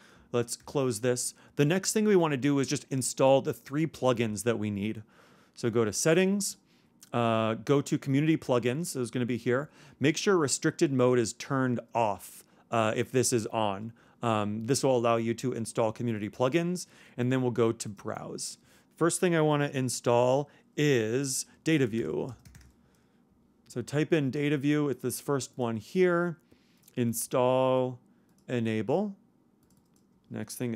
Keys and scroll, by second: 0.6 super+w.